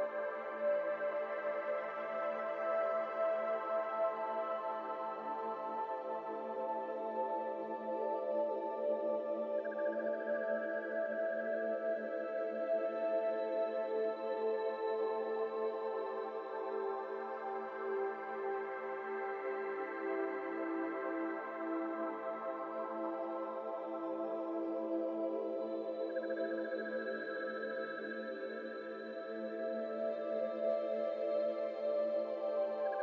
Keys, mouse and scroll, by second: 0.1-0.7 shift+middle drag, 0.7 Tab, 1.1 3, 1.4 click, 1.8 click, 2.4 ctrl+click, 2.9 shift+s, 3.4 Tab, 3.7 shift+a.